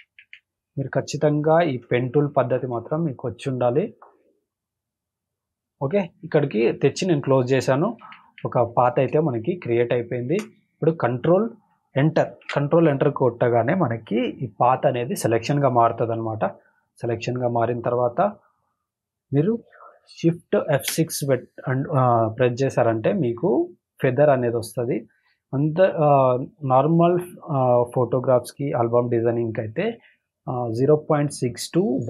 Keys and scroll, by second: 1.0 space, 1.6 space, 3.3 space, 8.0 ctrl+-, 9.1 space, 9.6 space, 12.4 ctrl+Return, 22.2 shift+F5.